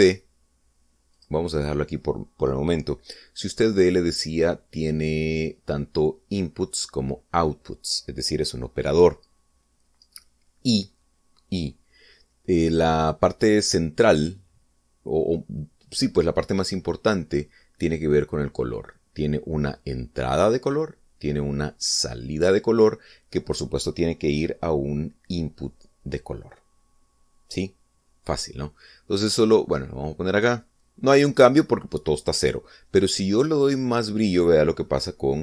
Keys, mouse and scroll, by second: 1.8 click, 29.6-31.3 drag.